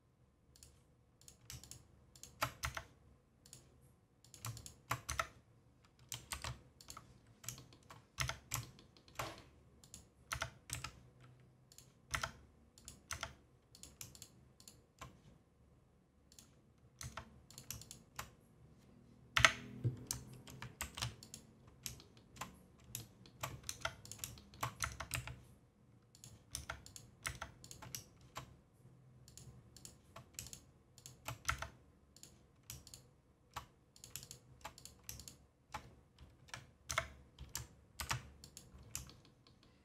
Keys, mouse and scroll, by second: 0.5 click, 1.6 shift+click, 2.1 shift+click, 2.6 Tab, 3.4 click, 4.2 click, 4.5 shift+click, 5.0 Tab, 7.2 scroll down 2, 7.5 shift+middle click, 7.9 scroll up 2, 8.2 Tab, 8.6-9.8 shift+middle drag, 9.8 click, 11.7 click, 12.7 click, 13.0 Tab, 13.7 click, 14.1 shift+click, 14.5 shift+click, 16.3 click, 17.0 Tab, 17.5 click, 17.8 shift+click, 19.3 Tab, 21.6-22.0 scroll down 2, 22.0 shift+middle click, 22.3 scroll up 1, 23.0 shift+middle click, 23.6 Tab, 24.0 click, 24.3 shift+middle click, 24.8 Tab, 25.1 a, 26.1 click, 26.5 Tab, 26.8 click, 27.2 Tab, 27.6 click, 29.2 click, 29.7 click, 30.4 shift+click, 30.9 shift+click, 31.4 Tab, 32.1 click, 33.9 click, 34.2 shift+click, 34.7 click, 35.2 shift+click, 36.9 Tab, 38.8 scroll down 3, 39.0-39.8 shift+middle drag.